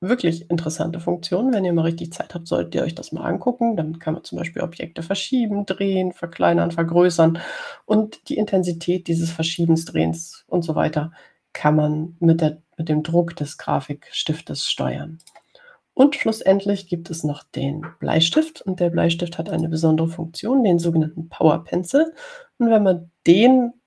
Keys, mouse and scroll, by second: 0.8 click, 10.7 click, 16.5 click, 20.8 click.